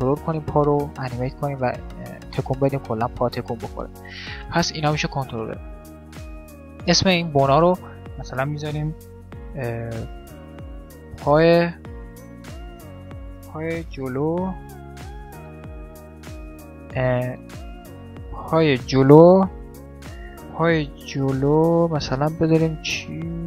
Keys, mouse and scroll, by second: 4.1 middle click, 4.8-6.6 drag, 4.8 right click, 6.7-8.3 middle drag, 7.2-8.9 drag, 9.0 click.